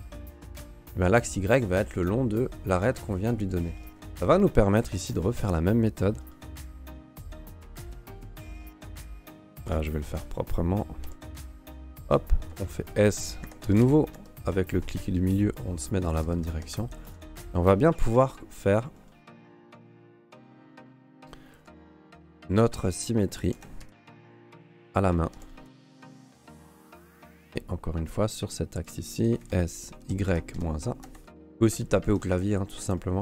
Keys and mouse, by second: 3.6 shift+right click, 4.0 a, 4.2 a, 5.0 shift+d, 11.0 g, 12.5 s, 15.3 g, 16.2 g, 17.7 shift+middle click, 18.0 shift+d, 21.6 g, 23.5 s, 25.3 g, 25.9 g, 27.4 shift+d, 29.4 s, 30.0 y, 30.3 KP_Subtract, 30.5 KP_1, 30.5 KP_4, 31.0 Escape, 32.0 shift+right drag, 32.3 Escape, 32.9 shift+middle click.